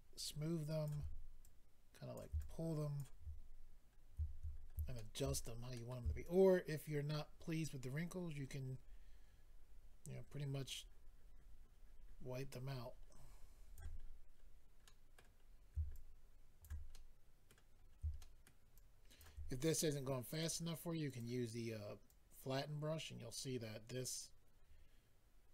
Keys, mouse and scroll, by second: 1.4 click, 2.4 click, 3.9 scroll down 1, 4.5-4.9 scroll up 2, 4.9 shift+middle click, 5.3-5.9 scroll up 3, 5.7 middle click, 6.2 shift+click, 14.0-14.4 scroll down 4, 14.8 middle click, 14.8-15.1 scroll down 2, 15.4-15.7 scroll up 4, 15.9 shift+click, 16.6 scroll up 3, 16.9 middle click, 17.7-18.4 scroll up 2, 18.1 shift+middle click, 18.7 shift+click, 20.3 click, 20.4 click, 21.1 click, 21.2 click, 22.1 click.